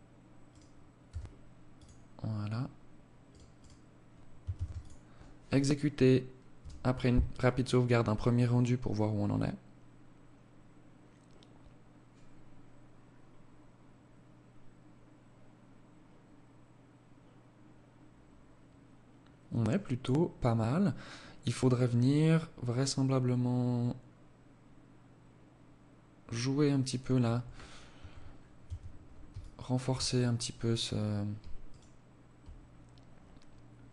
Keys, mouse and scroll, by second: 0.0 s, 1.1-1.8 scroll down 2, 1.6 scroll up 2, 2.2 right click, 2.5 right click, 3.4 ctrl+s, 26.8 Escape, 27.3 scroll up 3, 27.6 Tab, 28.3 alt+shift+click, 29.0 scroll up 3, 29.3 scroll down 1, 30.6 alt+right click, 32.8 scroll up 2, 33.6 ctrl+r.